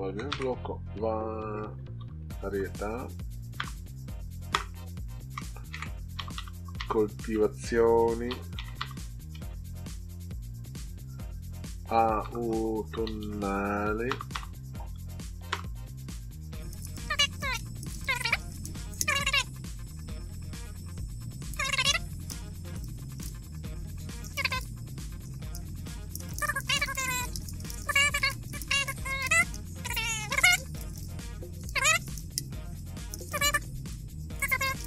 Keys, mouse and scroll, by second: 0.2-3.5 typing, 5.4-9.3 typing, 11.4-13.8 typing, 15.5 Return, 16.8-18.3 typing, 19.4 click, 20.0 click, 20.7 click, 21.1-21.5 scroll up 4, 21.8 scroll down 2, 22.7-24.9 typing, 25.9-29.3 typing, 30.4-34.8 typing.